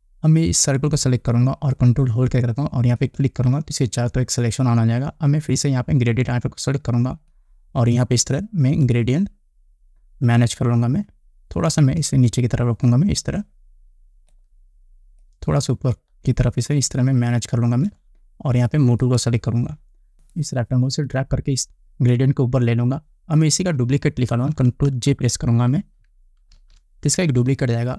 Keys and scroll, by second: 27.0 ctrl+j.